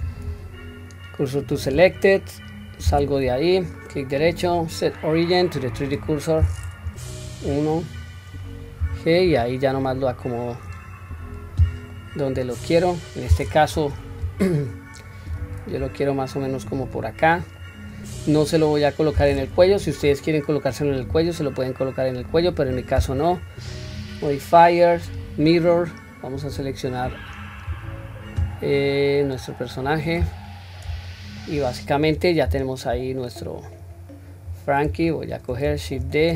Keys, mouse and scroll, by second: 2.2-3.0 scroll down 1, 3.0 Tab, 3.8-6.7 right drag, 6.9 KP_1, 7.5-8.8 scroll down 3, 8.8 g, 11.1-11.8 scroll down 1, 12.0-13.1 middle drag, 13.7 KP_3, 15.3 g, 17.6-18.7 middle drag, 19.6 KP_1, 20.1-20.6 scroll up 1, 21.1 s, 23.8-25.3 drag, 26.4 click, 29.9-30.4 scroll down 2, 31.1 shift+middle click, 32.5 r, 34.0 scroll down 1, 34.5-34.9 scroll up 1, 35.1 shift+middle click, 35.1 scroll up 1, 36.1 shift+d.